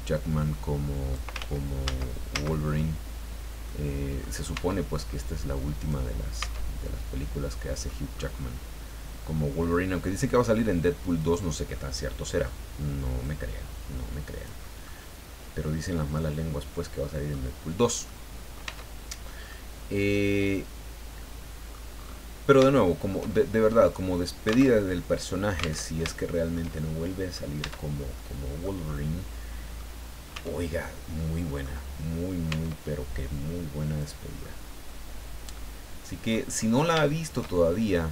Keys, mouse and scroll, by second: 0.8-1.3 scroll down 2, 1.4 ctrl+z, 3.6 middle click, 4.5 Tab, 5.0 scroll down 1, 5.8 right click, 6.4 Tab, 6.8-8.0 middle drag, 8.2-8.6 scroll up 1, 9.6 middle click, 11.2 right click, 11.7 middle click, 13.2-14.6 drag, 14.6 scroll down 1, 14.8 click, 14.9-17.5 middle drag, 17.6-17.9 scroll down 1, 18.0 middle click, 18.6 Tab, 19.0-19.5 scroll down 2, 19.5-21.9 middle drag, 21.9-22.6 scroll up 2, 22.7 shift+middle click, 23.6 middle click, 24.6 alt+Tab, 25.8 alt+Tab, 26.1 alt+shift+middle click, 27.1 middle click, 27.6 Tab, 28.1 middle click, 28.9-30.0 middle drag, 30.3 Tab, 30.8-31.8 middle drag, 32.5 Tab, 34.0 click, 34.4-36.5 middle drag, 36.6 middle click, 37.0 shift+middle click, 37.6-38.0 shift+scroll up 3.